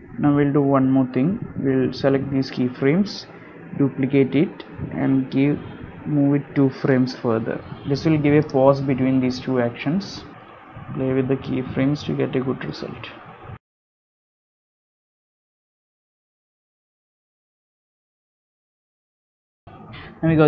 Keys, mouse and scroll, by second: 0.0 click, 1.8 space, 2.0-2.4 scroll down 7, 2.4 middle click, 3.7 click, 6.4 shift+d, 10.8 click, 11.0 space, 13.2 click, 13.8 click, 14.1 click, 14.4 click, 14.5 space, 14.6 click, 14.6 g, 15.0 click, 15.4 click, 15.4 space, 15.6 click, 15.9 click, 16.2 click, 16.3 click, 16.5 click, 16.6 click, 16.8 click, 16.9 space, 17.0 click, 17.3 r, 17.5 i, 17.6 space, 17.8 click, 18.2 click.